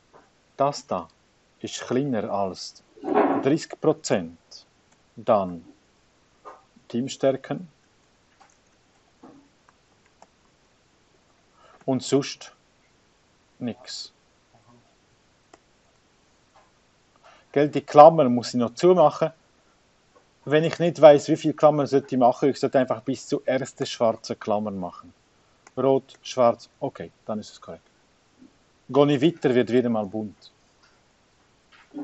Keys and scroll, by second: 0.0-2.3 typing, 3.2 Tab, 4.0 5, 4.7 0, 6.4 5, 8.3 ,, 9.1 2, 10.7-17.6 typing, 20.0 2, 25.2-28.7 typing, 29.5 Tab, 30.3 3, 31.1 0.